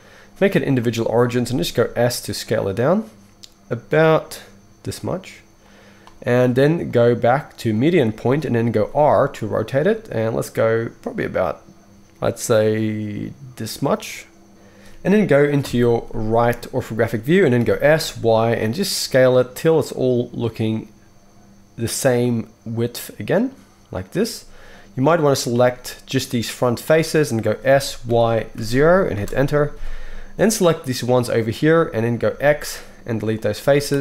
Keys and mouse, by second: 1.4 s, 5.7-6.9 middle drag, 6.9-14.5 drag, 8.7 r, 14.5-25.1 middle drag, 15.6 KP_3, 17.6 s, 25.1-34.0 drag, 27.7 s, 32.3 x, 33.7 z.